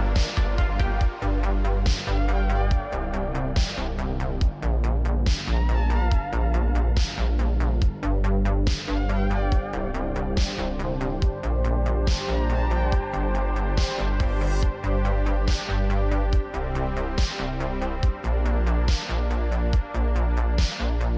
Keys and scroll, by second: 3.2 Tab, 14.6-21.1 typing.